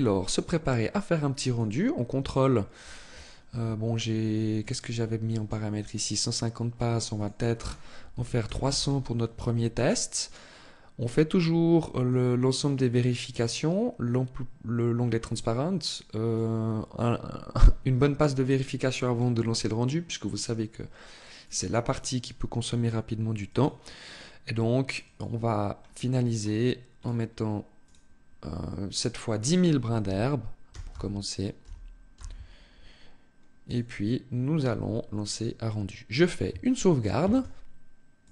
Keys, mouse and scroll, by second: 1.0 click, 2.4-2.8 scroll down 3, 4.2 click, 5.8 click, 6.7 click, 11.6 click, 15.8 click, 20.9 click, 23.0 click, 24.7 click, 26.0-27.6 scroll up 4, 27.6 click, 28.6 click, 37.1 ctrl+s.